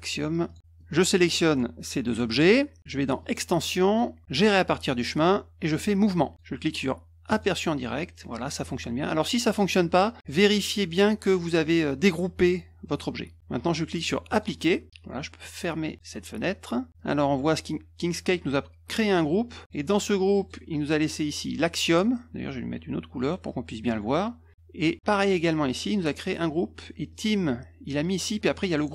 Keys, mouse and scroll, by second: 0.4 click, 0.8 click, 3.2 click, 7.3 click, 10.2-12.3 drag, 14.3 click, 16.9 click, 19.6 click, 20.3 click, 23.2 click, 25.2 click, 27.1 click, 28.6 click.